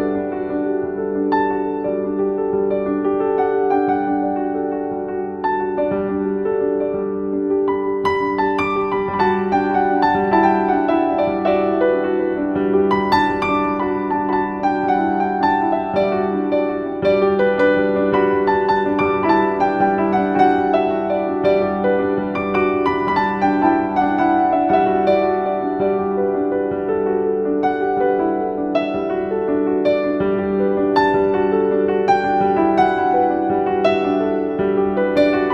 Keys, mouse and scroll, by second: 4.2-6.5 drag, 8.6-10.6 typing, 8.9 click, 9.3 click, 9.7 click, 10.2 click, 10.4 click, 10.8 click, 14.6-16.2 shift+drag, 16.2-16.9 typing, 16.5 click, 17.0 click, 20.4 click, 22.7 click, 24.5-29.2 typing, 24.9 click, 25.5 click, 25.8 click, 26.2 click, 26.5 click, 27.8 click, 28.8 click, 35.2 right click.